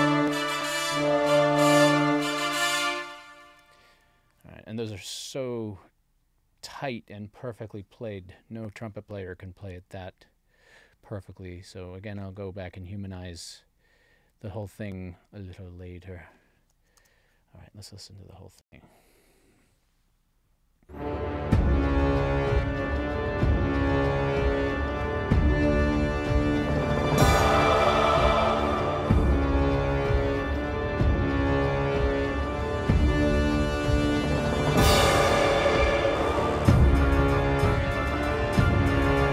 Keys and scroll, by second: 2.7 space, 3.4 super+s, 18.6 space.